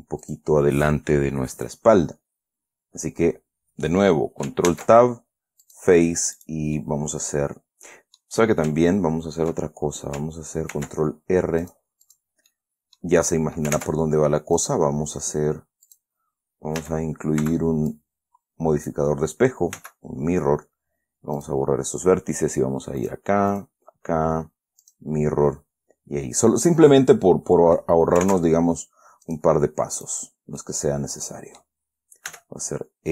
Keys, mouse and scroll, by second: 0.6 click, 5.0 ctrl+Tab, 6.0 click, 6.7 click, 7.1 middle click, 7.3-8.8 scroll down 1, 11.1 ctrl+r, 12.0 click, 12.4 click, 12.8 middle click, 14.1 ctrl+Tab, 14.9 click, 16.2 click, 17.1 a, 17.9 b, 18.2-19.4 drag, 20.1 x, 21.7 click, 23.4 click, 23.9 click, 25.2 click, 26.7-27.1 scroll up 2, 27.2-28.3 drag, 28.6 ctrl+Tab, 29.6 click, 30.3 right click, 30.6-30.9 scroll down 2, 30.9 click, 31.8-32.1 scroll down 2, 32.6 e.